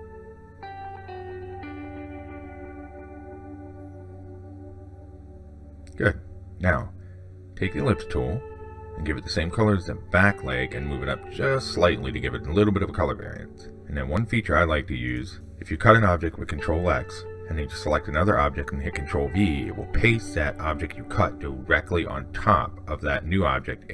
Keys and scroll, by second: 17.6 ctrl+x, 20.0 ctrl+v.